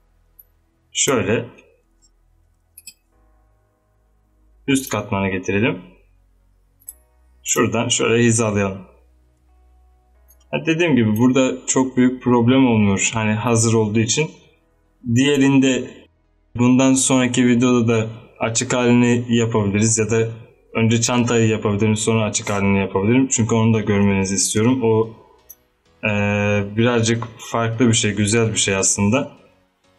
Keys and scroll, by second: 2.6 g, 24.2 space, 26.5 z.